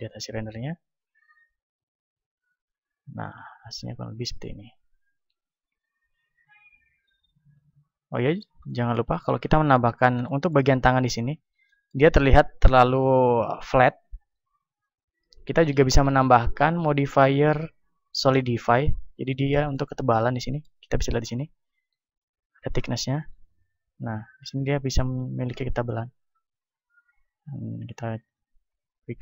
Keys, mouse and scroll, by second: 0.8 middle click, 3.0-6.1 middle drag, 5.2 Escape, 6.5 a, 7.8 KP_1, 8.1-15.3 middle drag, 10.8-14.1 drag, 14.7-16.3 drag, 18.3 click, 18.9-22.6 middle drag, 22.6-24.7 drag, 27.5-29.2 drag.